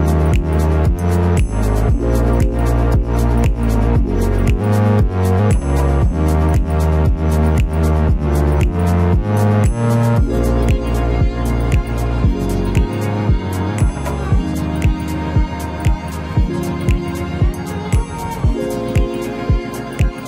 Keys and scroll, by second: 4.3 Escape, 7.4 Delete.